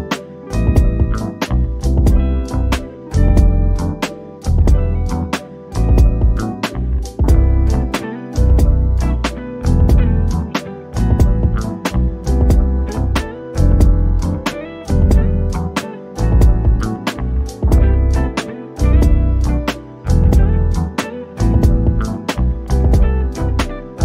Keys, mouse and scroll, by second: 4.7 Delete, 7.6 shift+click, 11.4 click, 13.2 m, 14.3 click, 16.5 Escape, 18.4 shift+click, 19.0-20.0 scroll up 1, 20.0 click.